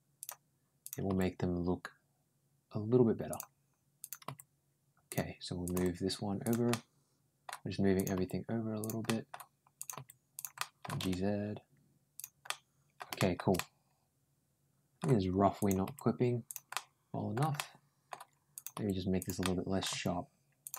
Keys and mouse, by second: 0.6 click, 0.9 g, 3.8 click, 4.1 g, 5.5 click, 5.6 g, 6.5 middle click, 7.8 click, 8.0 g, 8.9 middle click, 9.6 click, 9.8 g, 10.4 middle click, 10.7 g, 12.3 middle click, 13.0 middle click, 13.4-14.8 middle drag, 15.4 click, 15.7 g, 16.6 middle click, 17.4 middle click, 18.4 click, 18.6 g, 19.2 middle click, 19.7 g.